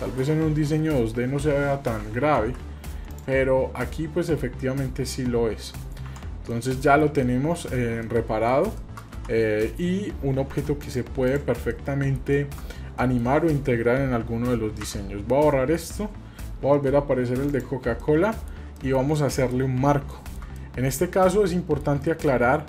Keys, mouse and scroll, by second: 2.4 ctrl+z, 3.1 click, 5.4-6.1 scroll down 2, 6.1 Tab, 6.5-7.0 middle drag, 7.1-7.6 shift+middle drag, 7.6 scroll down 2, 8.0 middle click, 8.8 shift+middle click, 9.2 Tab, 9.6 middle click, 10.5 Tab, 10.8 click, 11.2 click, 11.7-12.6 middle drag, 13.0 middle click, 14.8 Delete, 15.5-15.9 scroll down 2, 17.5 click, 17.5 scroll down 2, 18.0-18.5 middle drag, 18.7 shift+middle drag, 19.0 scroll down 1, 19.2-19.5 middle drag, 19.7 scroll up 1, 20.1 shift+middle click, 20.6 middle click, 21.5 shift+middle click, 22.0-22.6 middle drag.